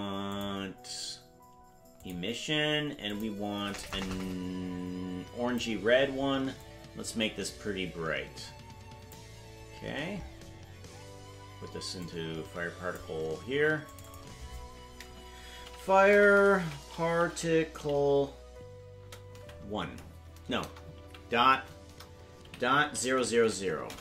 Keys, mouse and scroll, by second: 0.3-2.1 drag, 3.1 click, 6.6-9.1 drag, 9.8-10.3 scroll down 12, 12.0-13.2 drag, 13.8 click, 14.1-24.0 drag, 20.6 BackSpace, 23.1 0.